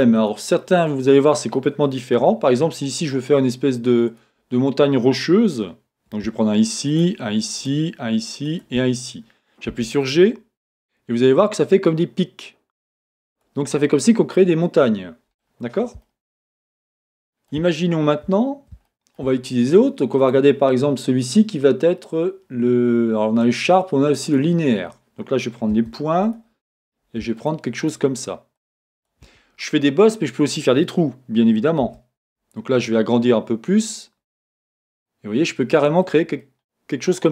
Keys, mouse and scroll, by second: 6.9 shift+click, 7.5 shift+click, 8.5 shift+click, 9.7 g, 13.4 click, 13.8-20.2 middle drag, 20.2-26.4 drag, 25.8 1, 27.4 shift+click, 27.8 shift+click, 28.2 shift+click, 28.6 shift+click, 28.9 shift+click, 31.9 g, 36.1 click, 36.4-37.3 middle drag.